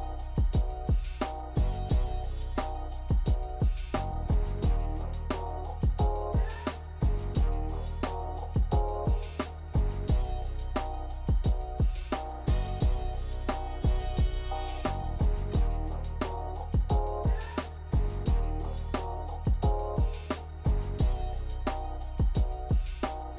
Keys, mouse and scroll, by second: 0.9-2.4 scroll up 3, 7.4 click, 9.0 i, 10.6 click, 12.3 click, 14.6 click, 17.5 i, 20.2 t.